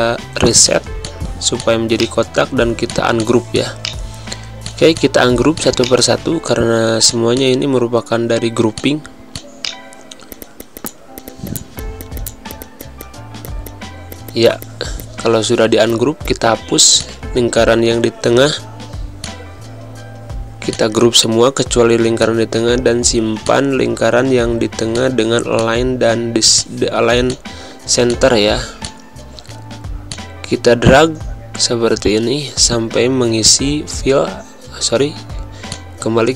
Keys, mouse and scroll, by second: 0.6 click, 2.0 right click, 2.8 click, 3.8 right click, 4.6 click, 5.8 right click, 7.0 click, 9.6 right click, 10.3 click, 10.9 right click, 11.2 click, 11.6 right click, 11.8 click, 12.3 right click, 12.5 click, 12.8 z, 12.8 click, 13.0 space, 13.3 v, 13.5 click, 14.0 Delete, 14.2 click, 14.3 click, 14.5 Delete, 14.5 click, 14.7 Delete, 15.0 click, 15.2 Delete, 15.6 z, 15.9 click, 16.2 space, 16.3 click, 16.3 space, 16.6 v, 17.0 click, 19.2 shift+click, 20.0 ctrl+g, 20.7 shift+click, 34.7 ctrl+z, 35.6 shift+z, 35.7 alt+shift+click.